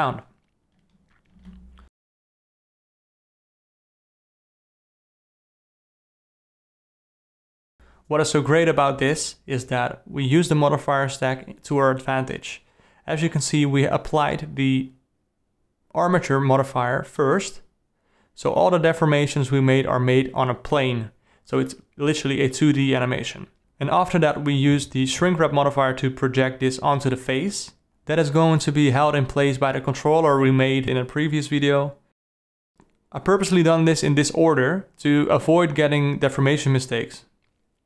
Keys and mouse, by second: 0.9-1.6 ctrl+middle drag, 1.8 middle drag, 2.2 alt+middle drag, 2.5 r, 7.6 ctrl+click, 8.8 click, 10.1 click, 14.1-14.8 alt+middle drag, 14.8-15.7 alt+drag, 16.7 Right, 17.8 Left, 18.1 Right, 18.6 Left, 21.3 ctrl+s, 25.5-25.9 middle drag, 26.7-27.3 ctrl+middle drag, 27.6-28.0 alt+middle drag, 30.4-31.3 ctrl+middle drag, 31.8-32.6 alt+middle drag, 34.3-35.4 drag, 35.6 ctrl+s.